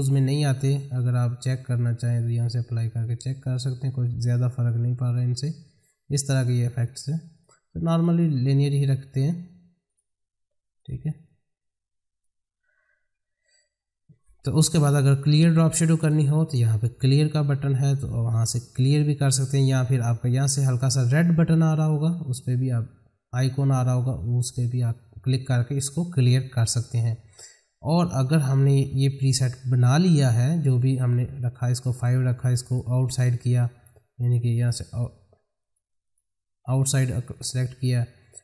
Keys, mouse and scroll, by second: 0.5-14.7 drag, 16.0 click, 18.0 ctrl+z, 31.9 click, 35.6 click.